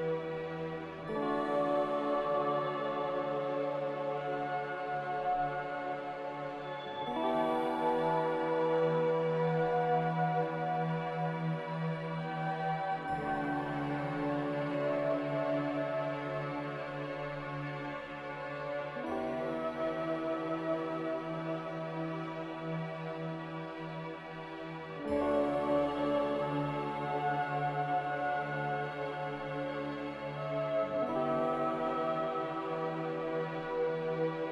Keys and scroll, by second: 0.1 b, 5.8 c, 6.8 Escape, 17.8 z, 18.9 z, 20.1 Delete, 20.6 c, 25.0 ctrl+z, 29.9 z, 31.9-32.7 typing.